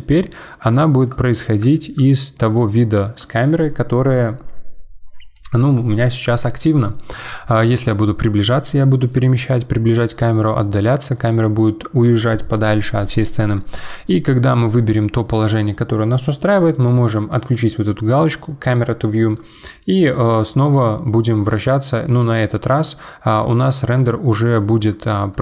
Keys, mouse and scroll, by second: 7.6-8.0 scroll up 8, 9.5-11.4 scroll down 15, 11.4-12.4 scroll up 5, 12.4-13.7 scroll up 1, 13.7-16.7 middle drag, 19.3 click, 20.2-22.0 middle drag, 22.0 scroll down 2, 22.6-24.8 middle drag, 24.8-25.4 drag.